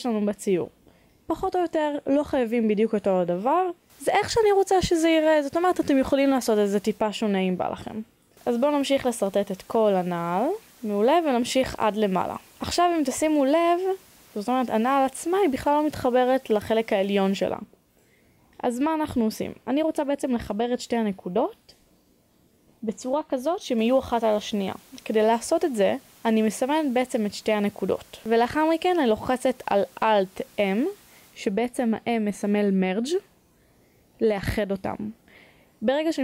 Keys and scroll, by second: 1.4 e, 4.5 e, 6.7 e, 8.4 e, 24.5 b.